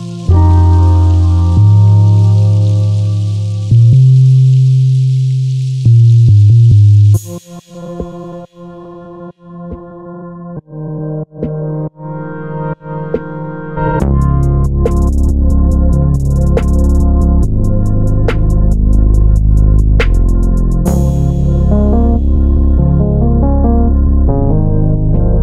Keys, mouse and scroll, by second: 0.2 shift+d, 2.4 click, 7.6-10.8 drag, 11.4-22.9 drag, 23.1 scroll down 1, 23.3-24.4 middle drag, 24.4 click, 24.9 scroll down 1, 25.1-25.4 middle drag.